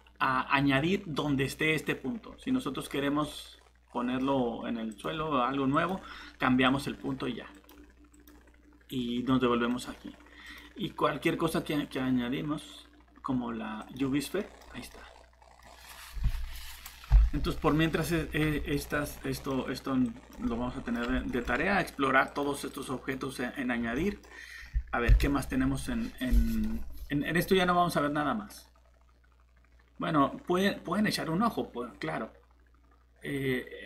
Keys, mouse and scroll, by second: 2.4-2.7 scroll down 1, 3.2 middle click, 4.9 click, 14.4 middle click, 14.6 scroll down 1, 14.9 middle click, 15.8-16.2 scroll up 1, 18.7 middle click, 20.0 click, 20.4 middle click, 22.3 click, 23.8 shift+Escape, 23.9 middle click, 25.1 Delete, 26.5 click.